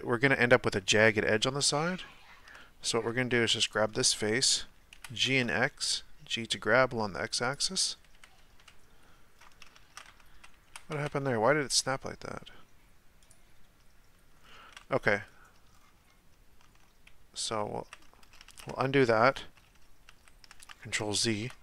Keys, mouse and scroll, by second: 0.9-3.3 shift+middle drag, 3.3 3, 3.7 right click, 3.9-4.9 middle drag, 4.9 g, 8.1 KP_1, 8.6 KP_Decimal, 9.4-9.8 scroll down 3, 9.8 ctrl+z, 10.7 g, 14.4 scroll down 1, 15.1 Tab, 15.7-16.6 scroll down 2, 16.6 Tab, 17.5 z, 18.5 ctrl+z, 19.2-19.7 scroll down 3, 19.7 ctrl+z, 20.1 ctrl+z, 20.7-21.3 scroll up 1, 21.3-21.6 shift+middle drag.